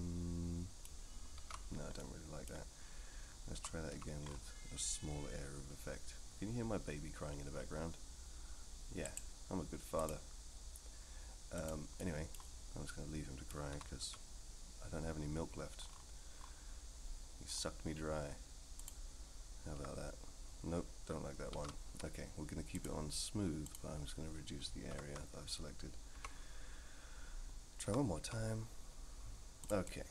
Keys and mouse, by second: 1.4 ctrl+z, 2.0 click, 3.5 r, 10.1-12.7 drag, 12.9 middle click, 13.7 r, 19.7 KP_1, 21.5 ctrl+z, 22.8-23.9 drag, 26.1 KP_3, 27.8 r, 29.8-30.1 middle drag.